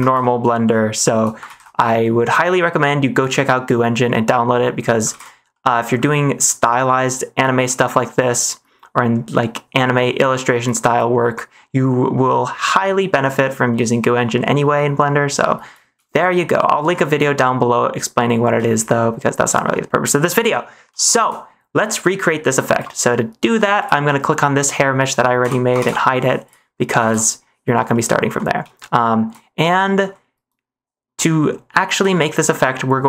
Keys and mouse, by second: 0.0 ctrl+space, 0.6-1.1 shift+middle drag, 1.4 ctrl+s, 1.9 shift+middle click, 3.6-4.8 middle drag, 5.1 ctrl+s, 5.4 middle click, 7.6 middle click, 10.9-13.2 middle drag, 14.6 middle click, 16.1 shift+middle click, 16.9 shift+middle click, 17.6 middle click, 18.6 shift+middle click, 19.6 middle click, 21.0 shift+middle click, 22.2 middle click, 22.6 -, 25.4 h, 25.8 ctrl+s, 27.0 ctrl+s, 27.9-28.2 middle drag, 28.8 shift+middle click, 29.7 shift+middle click, 32.1 shift+middle click.